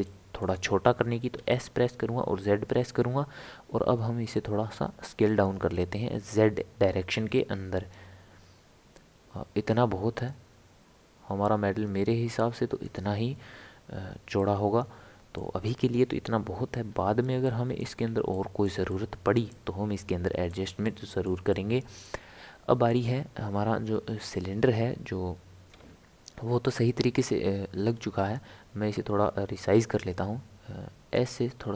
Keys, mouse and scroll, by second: 0.0-1.3 shift+middle drag, 1.3 s, 14.4-16.8 middle drag, 16.8-17.1 scroll down 3, 17.4-22.2 middle drag, 22.2-22.8 scroll up 4, 25.7 KP_7, 27.8-28.3 scroll up 3, 31.1 s.